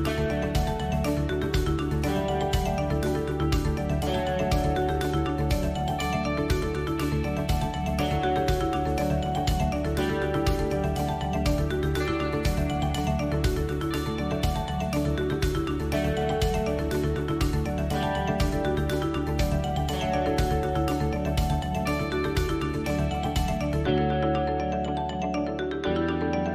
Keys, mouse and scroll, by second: 1.3 shift+space, 3.8 ctrl+space, 5.8 click, 6.3-8.3 drag, 13.4-15.4 drag, 15.6-16.6 shift+middle drag, 18.2-18.8 middle drag, 20.6 ctrl+space, 21.9 ctrl+space, 24.2-24.8 middle drag.